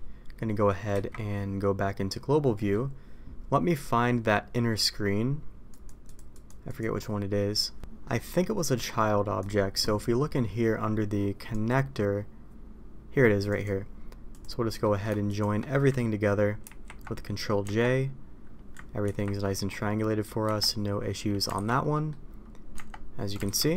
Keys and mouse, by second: 0.9 KP_Divide, 2.5 middle click, 5.6 click, 6.0 click, 6.3 click, 6.6 click, 7.8 alt+a, 8.0 middle click, 8.6 middle click, 9.3 click, 11.5 click, 13.4 click, 14.2 click, 14.6 middle click, 15.3 shift+click, 16.6 ctrl+j, 17.6 Tab, 19.0 ctrl+t, 20.4 Tab, 21.5 alt+a, 21.9 middle click, 22.7 Tab, 23.4 alt+a, 23.6 middle click.